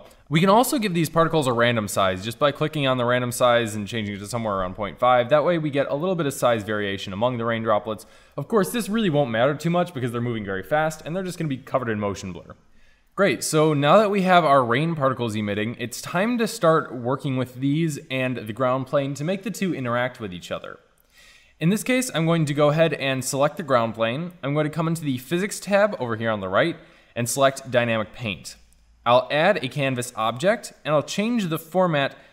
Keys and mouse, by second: 2.6-4.4 drag, 5.2-8.8 middle drag, 14.0-15.2 middle drag, 15.6 middle click, 21.2-22.9 drag, 23.2 middle click, 25.3 click, 27.7-29.5 drag, 31.8-32.3 drag.